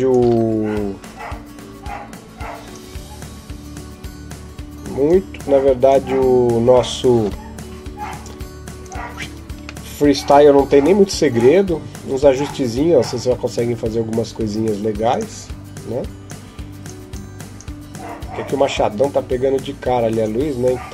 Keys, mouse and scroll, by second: 0.0 click, 8.0 F12, 8.0 Escape, 8.0 click, 8.6 right click, 9.7 middle click.